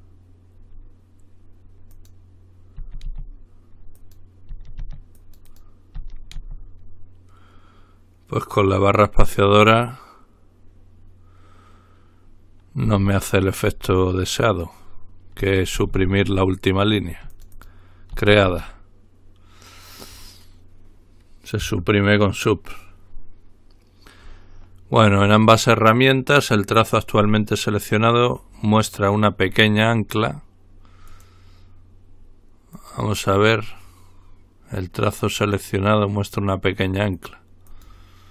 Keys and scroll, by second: 22.1 Delete.